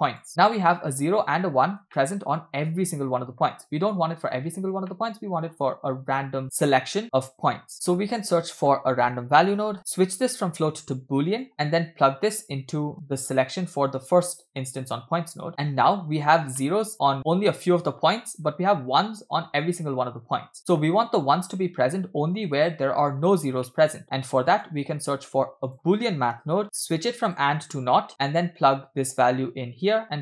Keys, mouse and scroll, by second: 0.6-1.4 shift+middle drag, 1.9 shift+middle drag, 2.3 scroll up 2, 3.1-3.5 scroll down 2, 5.0-5.6 shift+middle drag, 6.4 shift+middle click, 7.7 shift+a, 9.8-10.3 scroll up 2, 10.3 scroll up 3, 10.4-11.5 drag, 11.5 middle click, 12.3-14.4 drag, 14.6-15.0 middle drag, 16.6 middle click, 17.2 scroll down 2, 19.7-20.6 shift+middle drag, 20.9 scroll up 1, 22.2-22.6 scroll down 1, 23.7 middle click, 24.0 scroll down 2, 24.4 click, 25.0 shift+a, 26.6 o, 26.7-27.3 scroll up 2, 27.4-27.7 drag, 28.3 middle click, 29.2-30.0 drag.